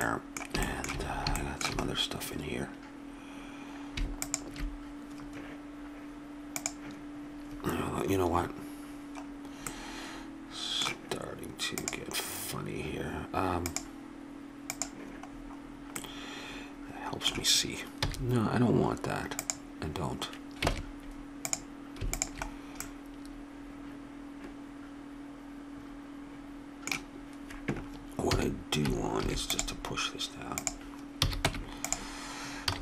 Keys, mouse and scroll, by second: 1.1 middle click, 15.5 middle click, 16.6 middle click, 18.0 x, 20.7 ctrl+Tab, 22.1 click, 28.2 a, 29.2 ctrl+r, 31.2 a, 31.5 Tab, 32.7 a.